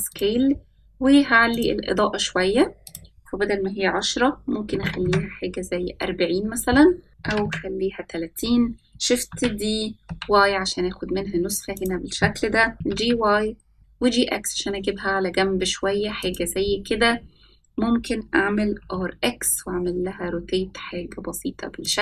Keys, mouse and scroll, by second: 1.4 click, 2.8-4.9 drag, 7.0 scroll up 2, 7.1 click, 9.2 shift+d, 12.7 g, 18.7 r.